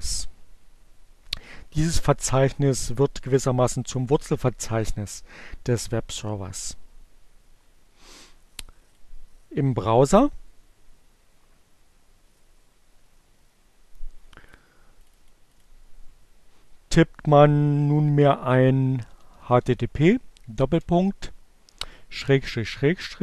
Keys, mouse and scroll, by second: 15.5 click, 16.3 click, 20.2-22.7 typing.